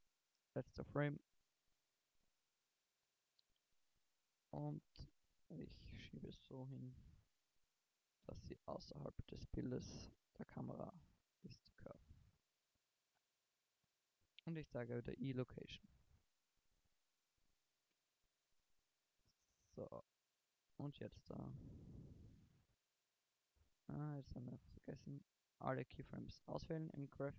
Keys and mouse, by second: 6.7 KP_0, 10.2-11.7 middle drag, 12.7 i, 16.2 middle click, 19.3 shift+Left, 19.9 shift+Right, 20.9 alt+a, 24.3 alt+a.